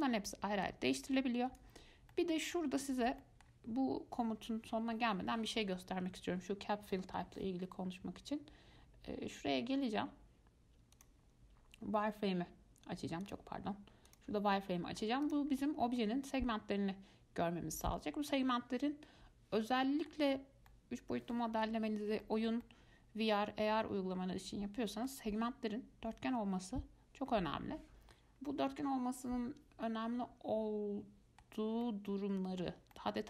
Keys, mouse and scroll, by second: 2.3-6.4 middle drag, 11.2-14.8 drag, 14.8-15.5 middle drag, 15.5 click, 15.8 scroll up 2, 16.2-18.3 middle drag, 18.3 scroll down 2, 18.5-20.6 middle drag, 20.6-20.9 scroll up 1, 20.9-25.8 middle drag, 28.7-31.7 middle drag, 32.0-33.2 middle drag.